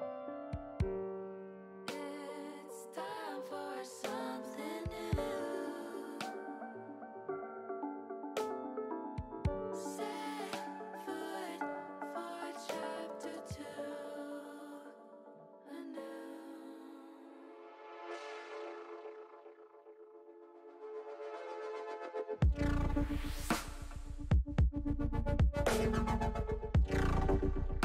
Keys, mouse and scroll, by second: 6.5 click, 7.3 middle click, 9.2 ctrl+z, 9.5 ctrl+z, 11.6 ctrl+z, 11.7 ctrl+z, 11.8 ctrl+z, 12.8 middle click, 18.9-20.1 middle drag, 20.4-22.0 middle drag, 23.6 ctrl+r.